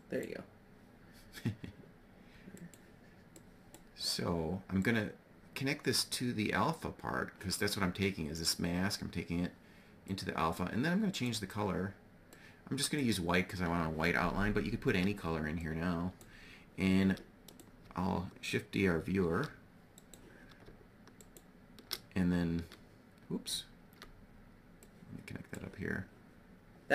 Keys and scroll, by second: 18.7 shift+d.